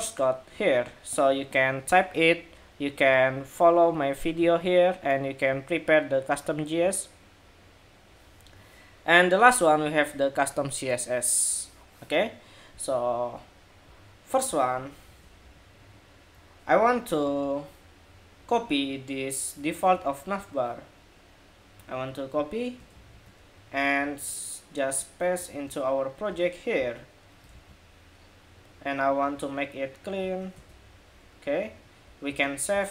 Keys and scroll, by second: 14.9 super+-, 22.6 super+c, 27.2 super+v, 32.0 super+s, 32.5 super+Tab.